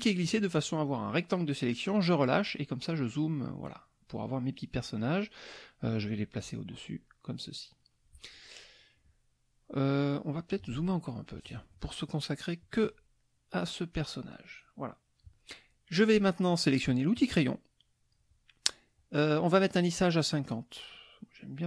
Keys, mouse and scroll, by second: 3.2 middle click, 4.5 middle click, 5.9 middle click, 7.1 middle click, 11.3-13.0 drag, 13.2 middle click, 14.2 middle click, 17.2 click, 19.9-21.6 drag.